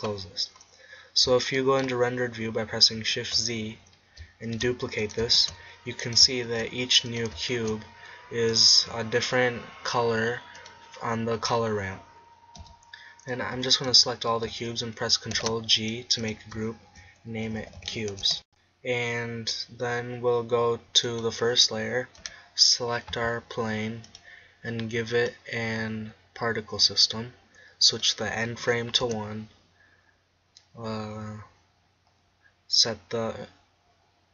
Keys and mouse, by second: 0.6-1.8 middle drag, 3.2 shift+z, 4.5 shift+d, 5.4 shift+d, 6.5 shift+d, 7.7 shift+d, 12.7 z, 13.6 a, 13.9 a, 15.4 ctrl+g, 16.3-18.0 drag, 21.1-26.8 drag, 27.9-29.9 drag, 30.0-34.3 drag.